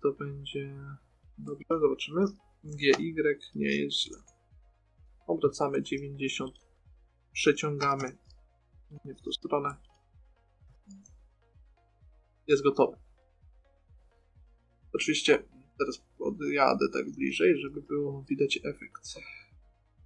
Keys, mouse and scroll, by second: 3.1 g, 3.8 click, 4.4 a, 4.5 a, 5.4 r, 8.2 g, 9.8-12.2 right drag, 10.9 g, 13.2 middle click, 16.9 shift+f.